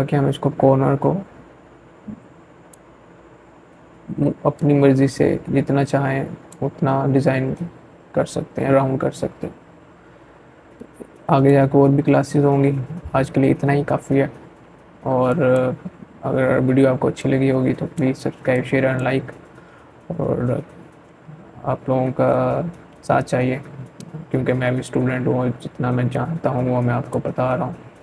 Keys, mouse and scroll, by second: 5.4-7.0 scroll down 1, 8.6-11.9 drag, 13.1 click, 15.0-19.3 shift+drag, 24.0-27.5 drag.